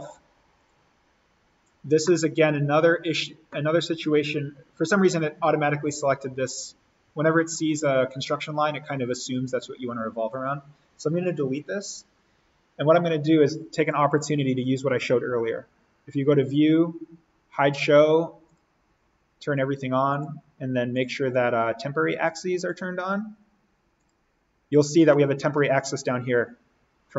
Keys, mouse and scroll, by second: 2.1 middle click, 2.8-4.9 scroll up 1, 4.9 scroll down 1, 10.3 click, 11.6 Delete, 13.8 click, 17.5 click, 24.5-24.9 scroll down 1, 25.1 middle click, 25.9 scroll up 1.